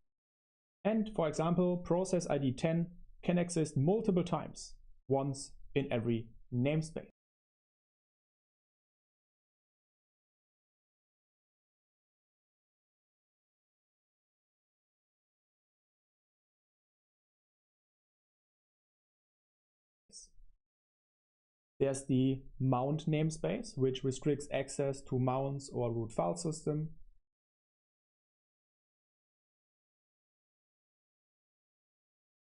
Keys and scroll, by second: 9.9 super+7, 10.7-19.7 typing, 19.5 super+1, 19.7 super+1, 27.3 space, 28.7 super+7, 29.4 Escape, 30.2-32.4 typing.